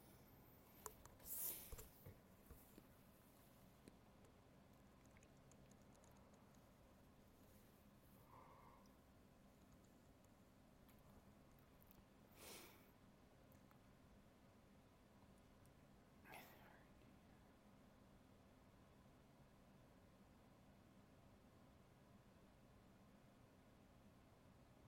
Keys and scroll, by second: 0.0 alt+space, 1.4 alt+space, 8.4 alt+space, 16.0 alt+space, 19.0 alt+space, 20.0 ctrl+z.